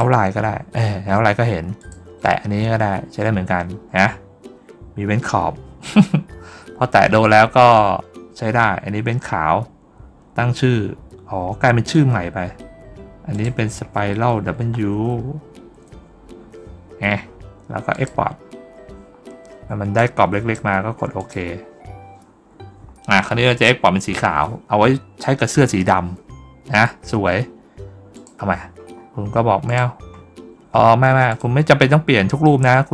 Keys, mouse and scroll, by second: 1.6 click, 13.2 click, 17.8 click, 19.8 click, 21.0 click, 28.0 click, 28.8 middle click, 28.8 scroll down 1, 29.5 click, 31.1 click, 32.3 scroll down 1.